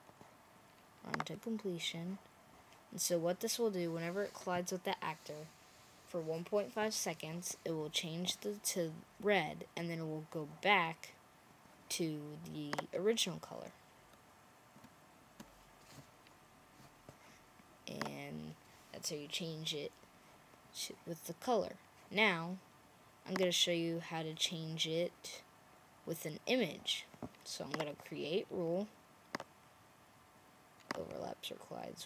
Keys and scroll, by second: 13.6 Right, 14.1 Right, 14.3 Right, 14.6 Right, 15.2 Right.